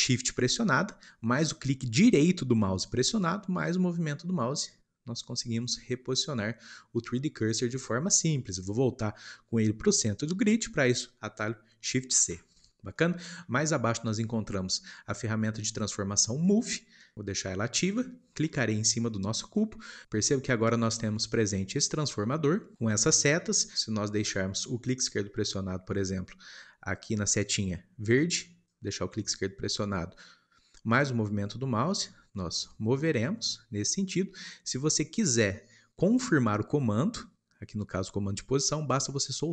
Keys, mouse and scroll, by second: 2.8-5.6 shift+right drag, 12.1 shift+c, 12.8-16.5 shift+middle drag, 16.5 click, 18.4-19.5 shift+middle drag, 19.5 click.